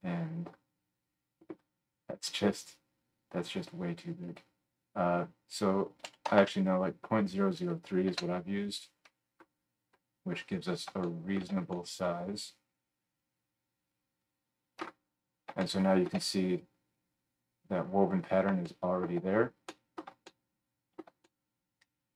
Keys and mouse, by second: 6.3 KP_0, 10.5-22.1 middle drag.